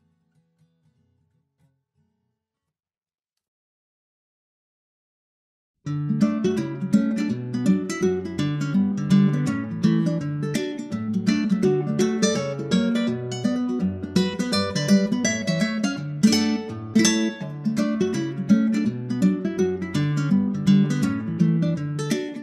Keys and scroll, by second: 1.4 super+Right, 9.2 shift+super+Left, 9.7 shift+super+Right, 10.3 super+Right.